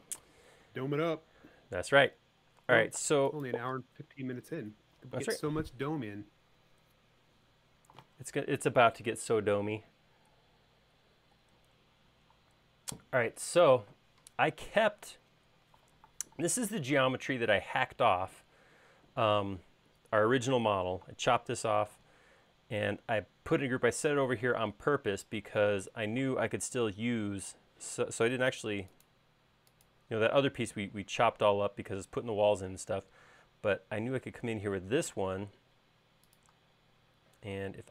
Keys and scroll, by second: 26.3 q, 27.6 Left, 28.0 Right, 31.2 space, 35.8 m.